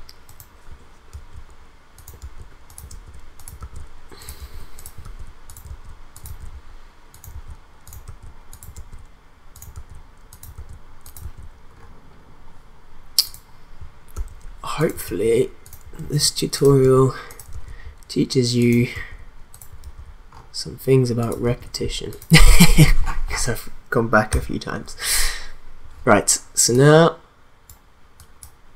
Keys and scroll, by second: 1.1 ctrl+v, 3.0 ctrl+v, 8.2 ctrl+v, 14.1 ctrl+v, 16.0 ctrl+v, 19.5 ctrl+v.